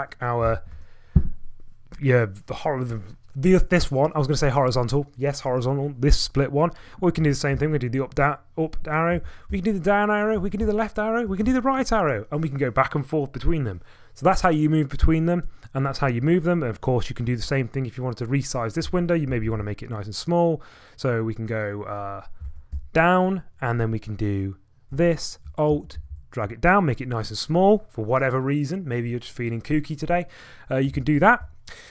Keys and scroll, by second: 0.4 ctrl+a, 7.2 ctrl+a, 7.5 Up, 9.1 ctrl+a, 10.4 ctrl+a, 11.3 ctrl+a, 18.9 ctrl+a, 22.4 ctrl+a, 24.9 ctrl+a, 25.7 alt+Down, 26.0 alt+Down, 26.1 alt+Down, 31.1 ctrl+alt+Return.